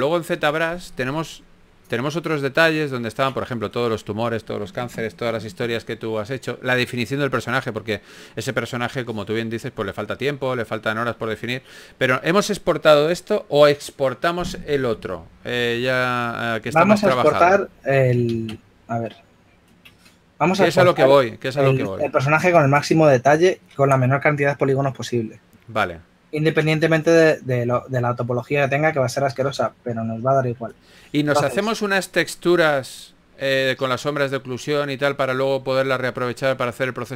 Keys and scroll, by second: 4.1 super+z, 6.0 typing, 19.2 super+Tab, 29.7 shift+f.